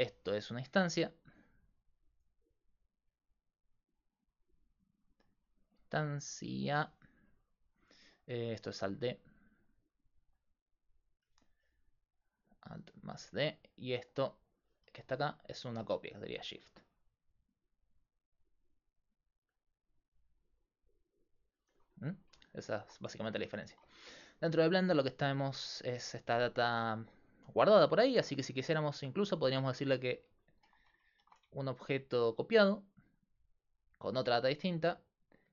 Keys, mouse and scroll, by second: 0.1-21.7 typing, 0.8-5.7 drag, 8.7-11.4 drag, 16.5-18.4 drag, 20.0-21.8 drag, 22.7 right click, 23.2-27.1 middle drag, 28.6-31.1 right drag, 31.2 shift+d, 33.3-35.5 drag.